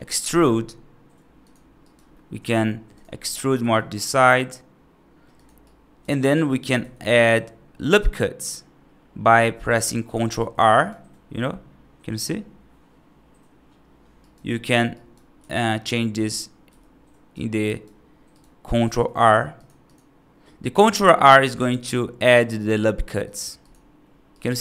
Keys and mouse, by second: 0.2 e, 1.7 right click, 2.0 middle click, 3.0 middle click, 3.4 e, 5.5 right click, 6.2 right click, 6.7 ctrl+r, 10.6 right click, 11.0 middle click, 14.1 right click, 14.5 middle click, 14.8 right click, 15.3 g, 17.5 right click, 18.2 right click, 18.7 ctrl+r, 21.4 ctrl+r, 24.2 right click.